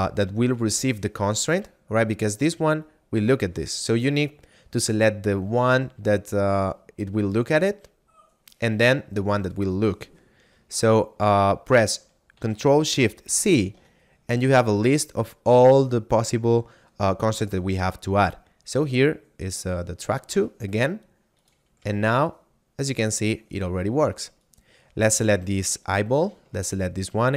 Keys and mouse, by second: 13.3 ctrl+shift+c, 19.8 click, 21.4 right click, 21.8 g, 23.5 right click, 26.0 shift+right click.